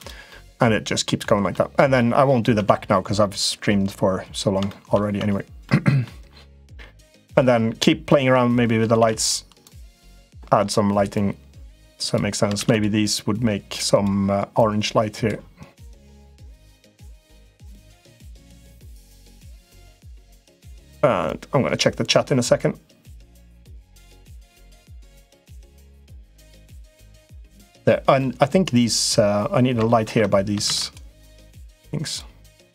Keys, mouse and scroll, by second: 0.1 middle click, 1.4 middle click, 1.9 middle click, 2.3 Tab, 4.4 shift+middle click, 5.0 Tab, 5.4 middle click, 6.8 middle click, 7.8 click, 8.9 shift+d, 9.4 click, 10.1 middle click, 10.9-12.1 drag, 12.5 shift+d, 13.0 click, 14.5 click, 15.7 click, 17.8 middle click, 18.6 click, 19.7 middle click, 21.1 click, 22.3-23.7 drag, 23.9 middle click, 24.8 click, 26.0 click, 27.6 middle click, 29.9 ctrl+z, 30.6 shift+d, 31.3 click, 32.6-32.7 drag.